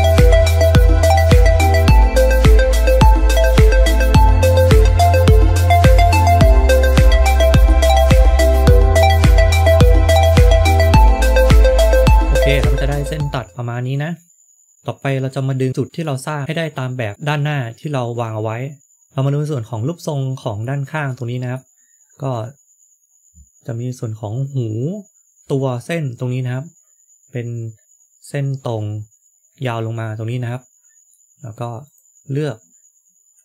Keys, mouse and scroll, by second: 0.6 k, 2.2 shift+middle click, 2.7 shift+middle click, 7.8 scroll down 1, 7.9 shift+middle click, 10.9 click, 10.9-11.7 scroll up 2, 11.7 middle click, 15.9 middle click, 17.0 middle click, 18.8 middle click, 20.9 middle click, 30.4 middle click, 31.7 click.